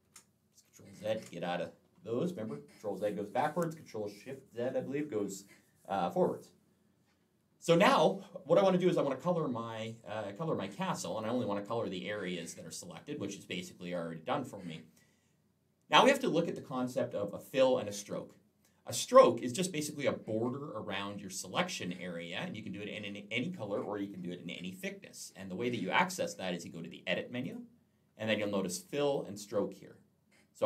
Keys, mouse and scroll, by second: 27.3 click.